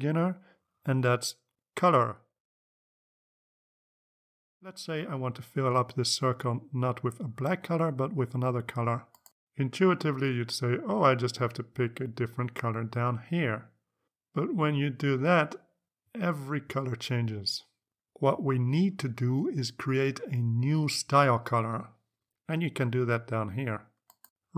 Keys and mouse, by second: 7.7 click, 9.9-14.3 drag, 20.7 click.